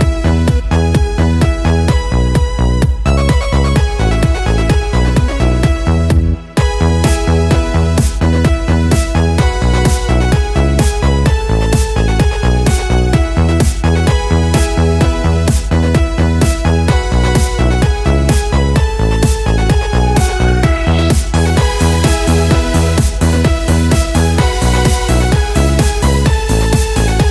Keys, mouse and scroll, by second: 0.2-1.4 middle drag, 1.4 click, 1.8 middle click, 2.2-3.7 middle drag, 2.3 right click, 3.7 click, 4.4 middle click, 4.6-5.9 middle drag, 5.0 right click, 5.6 r, 7.1-8.6 right drag, 7.4 r, 8.7-10.4 drag, 10.5 click, 10.9 middle click, 11.2 r, 11.9-13.5 right drag, 12.1 middle click, 13.4 click, 14.7 click, 15.6 middle click, 16.2-17.7 drag, 17.9-18.4 scroll down 1, 18.4 middle click, 18.8-19.2 scroll up 1, 18.9 a, 19.2 middle click, 20.5 r, 21.1-22.3 right drag, 22.4 click, 23.6 l, 24.6 r, 26.0 right click.